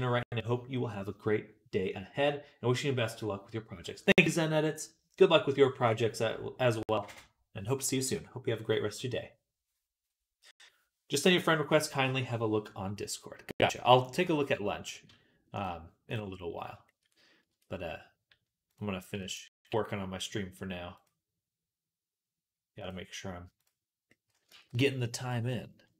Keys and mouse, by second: 13.5-15.4 middle drag, 15.4 click, 15.5 middle click, 15.9 click, 16.0-19.1 middle drag, 17.3 Tab, 19.1 alt+shift+click, 19.4-23.9 alt+shift+middle drag, 23.9-25.9 drag, 24.3 ctrl+z.